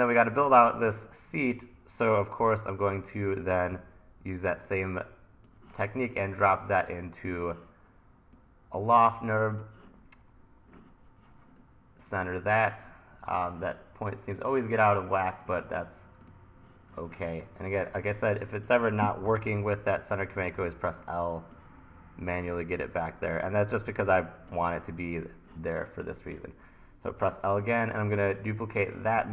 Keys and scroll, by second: 1.7 r, 2.4 t, 3.7 e, 19.3 l, 23.9 1, 27.1 l, 29.2 e.